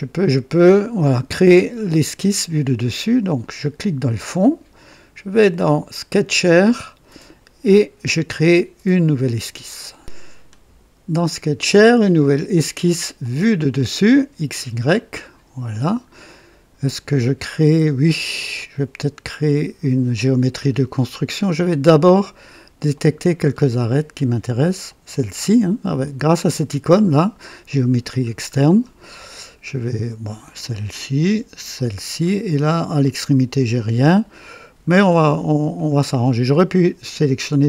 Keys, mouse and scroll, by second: 3.3 click, 4.8 click, 6.1 click, 9.8 right click, 13.1 click, 14.9 click, 15.8-16.1 scroll down 2, 16.2 right click, 17.3 scroll up 2, 18.1-18.9 right drag, 20.6 scroll up 2, 21.3 right click, 22.9 click, 23.5 scroll up 2, 24.8 click, 28.2 scroll down 2, 28.7 right click, 30.4 click, 31.7 click, 34.9 scroll down 2, 35.7-36.4 right drag.